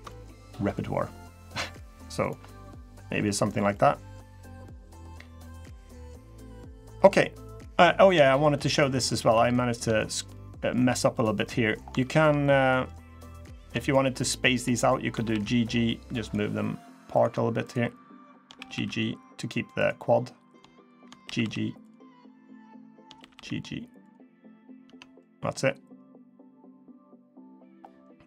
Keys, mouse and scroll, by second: 0.1-0.5 scroll down 1, 0.8 click, 2.0 click, 2.2 ctrl+click, 2.2 middle click, 3.3 scroll down 1, 3.5 middle click, 4.5 middle click, 5.3 middle click, 6.0 middle click, 7.2-8.3 scroll up 7, 8.1 shift+middle click, 8.2 shift+middle click, 8.3 middle click, 8.8 scroll down 3, 9.1 1, 9.7 middle click, 10.1 middle click, 10.1 scroll up 1, 10.3 scroll down 1, 10.6 1, 10.9 click, 11.2 middle click, 11.5 scroll up 1, 11.7 shift+middle click, 12.2 middle click, 13.0 middle click, 13.1 shift+middle click, 13.4 middle click, 13.6 shift+click, 14.2 shift+click, 14.9 g, 16.9 click, 17.4 shift+click, 18.0 click, 18.3 g, 20.2 click, 20.6 shift+click, 21.0 g, 22.1 click, 22.5 shift+click, 22.9 g, 24.0-24.4 scroll down 3, 24.4 middle click, 24.6 Tab, 24.9 middle click, 26.7 middle click, 27.3 scroll up 2, 27.8 middle click.